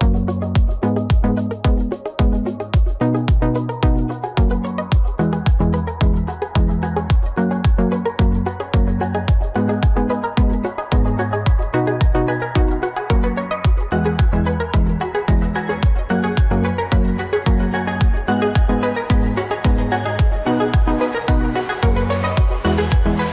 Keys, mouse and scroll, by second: 2.9 ctrl+j, 3.5 ctrl+j, 8.0 shift+click, 9.1 ctrl+g, 13.1 Right, 15.3 Right, 15.5 ctrl+=, 16.0 ctrl+=.